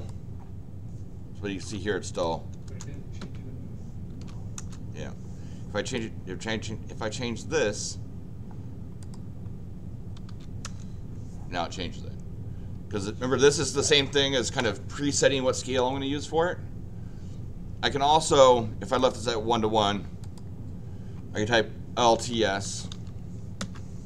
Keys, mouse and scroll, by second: 1.2-2.1 typing, 2.1 click, 2.6 Return, 3.2 Escape, 3.9-4.7 typing, 5.8 click, 9.0 click, 10.0-10.8 typing, 18.9 click, 20.2 click, 22.1-23.4 typing, 23.6 Return.